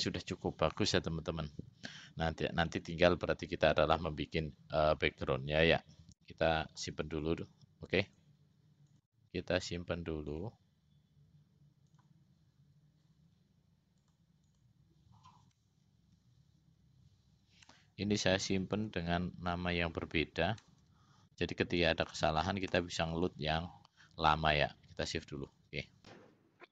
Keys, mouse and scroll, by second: 8.3 click, 9.1 click, 10.5-13.2 drag.